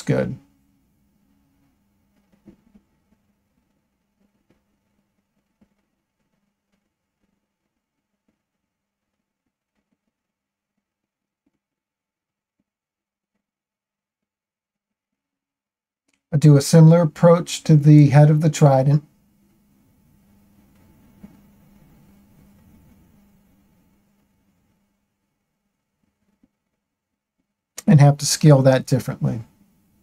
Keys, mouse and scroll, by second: 0.4-0.8 scroll up 2, 1.3-3.9 shift+middle drag, 5.9 click, 7.0-10.2 shift+middle drag, 11.0 Tab, 12.2-14.0 shift+middle drag, 14.7 Tab, 16.4 click, 19.0 ctrl+l, 21.8 shift+middle click, 22.9 shift+middle click, 24.0 space, 28.4-30.0 drag.